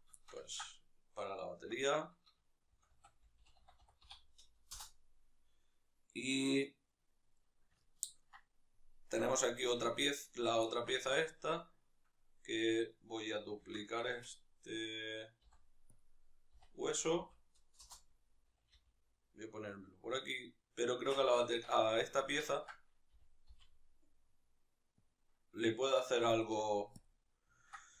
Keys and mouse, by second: 4.5 Return, 9.4 z, 10.0-10.4 right drag, 10.4-13.7 ctrl+middle drag, 13.3 shift+d, 13.7 right click, 15.7 ., 16.3 r, 19.6 click, 21.5 alt+q, 22.0-24.8 ctrl+shift+middle drag, 22.8 g, 24.8 click, 26.8 alt+q, 27.3-28.0 ctrl+middle drag.